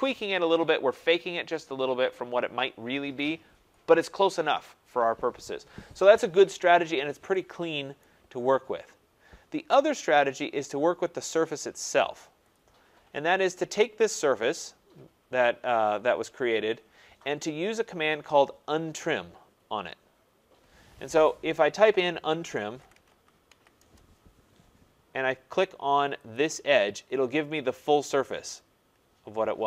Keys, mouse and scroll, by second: 6.5 middle click, 6.5 middle click, 6.6 scroll, 7.9 right click, 7.9 scroll, 8.8 scroll, 9.4-10.8 scroll, 11.3 middle click, 11.4 middle click, 12.5 click, 14.7 middle click, 15.2 middle click, 15.4 middle click, 16.2 scroll, 17.4 scroll, 19.0 scroll, 22.3-24.3 typing, 23.7 Return, 26.3 click, 27.1 middle click, 27.2 middle click, 27.9 middle click, 28.5-29.2 typing.